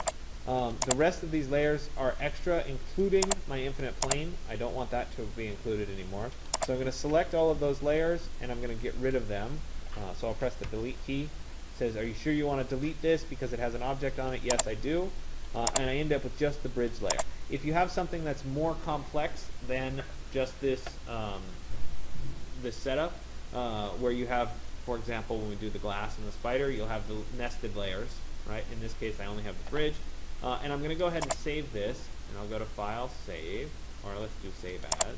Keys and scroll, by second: 10.4 Delete.